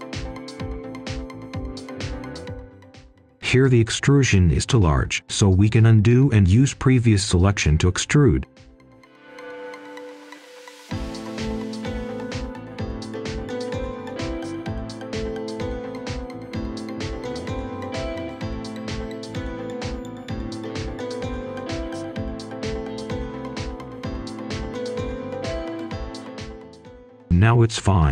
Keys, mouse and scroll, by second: 1.1-1.5 scroll up 1, 1.5 right click, 1.9 scroll down 1, 2.1 right click, 2.9-4.2 scroll up 1, 4.2-5.5 drag, 5.5 right click, 6.0 ctrl+z, 6.3 right click, 7.6 click, 8.6 shift+click, 9.3-9.8 scroll up 1, 9.8 scroll down 1, 10.1-10.5 scroll up 1, 11.0 ctrl+e, 14.6-15.0 typing, 16.2 Return, 16.6 right click, 23.4 click, 24.0 right click, 25.7 click, 27.0 scroll down 1, 27.2 scroll up 1, 27.3 right click.